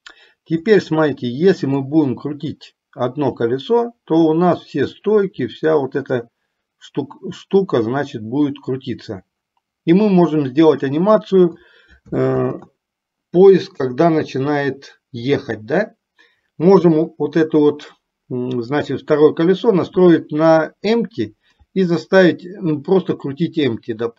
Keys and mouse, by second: 0.7 click, 2.0-11.7 drag, 12.6 ctrl+z, 18.9 click.